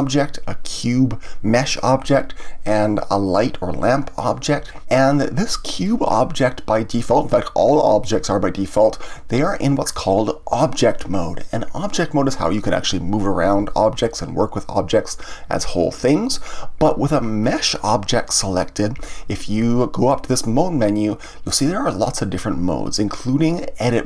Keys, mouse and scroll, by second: 0.7 click, 3.2 click, 5.8 click, 17.4-20.6 scroll up 1, 20.8-23.8 drag.